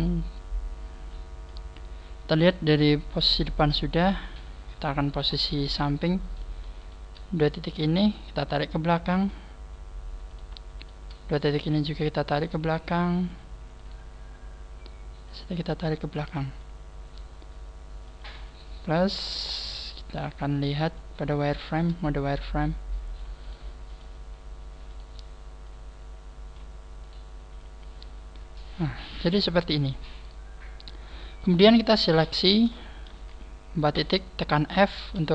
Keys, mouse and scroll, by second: 0.0 click, 0.4 click, 3.2 KP_1, 3.9-4.4 scroll down 5, 4.4-5.8 scroll up 20, 6.8 shift+right click, 8.0 click, 10.3 right click, 10.8 shift+right click, 11.9 click, 13.8 right click, 15.3 click, 18.0 click, 19.5 click, 21.0 click, 21.4 shift+middle click, 22.4 click, 22.5 shift+middle click, 23.4 right click, 23.9 click, 24.9 right click, 25.6 click, 27.0 right click, 27.6 click, 31.4 shift+right click, 33.9 shift+right click, 34.0 f, 34.9 right click.